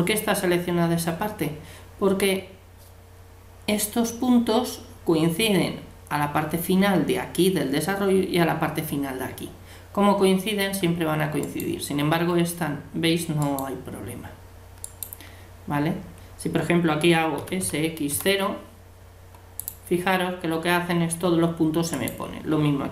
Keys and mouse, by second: 11.4-13.2 right drag, 13.4-16.6 right drag, 17.4 s, 21.9-22.9 right drag.